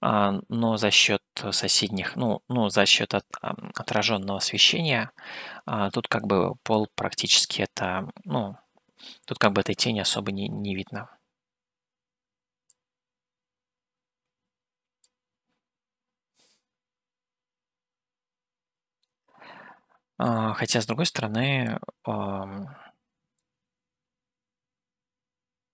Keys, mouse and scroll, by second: 4.7-6.7 drag, 15.2 click, 22.1-24.1 drag.